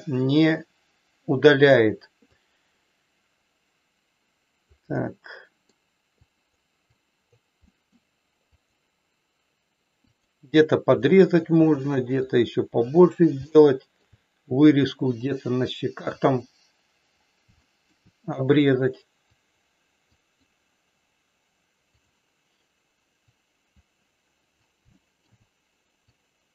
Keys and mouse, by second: 2.3-4.5 drag, 4.9 middle click, 6.3 click, 6.8 click, 7.7 middle click, 8.5 click, 10.0 click, 11.0 shift+middle click, 12.3 click, 13.4 shift+middle click, 16.2 click, 17.5 shift+middle click, 19.3 click, 20.0 click, 21.9 click, 23.3 click, 24.9 shift+middle click, 26.2 click.